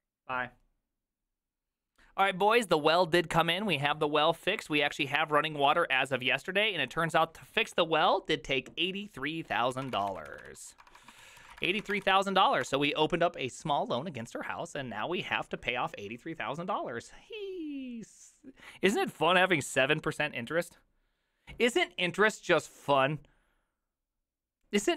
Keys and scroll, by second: 9.7-13.2 typing.